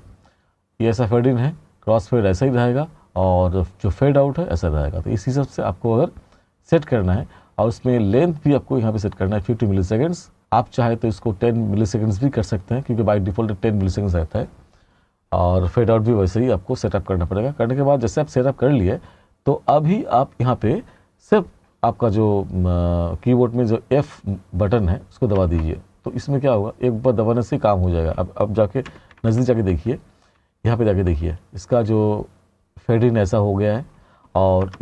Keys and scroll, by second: 25.4 f, 28.9 t.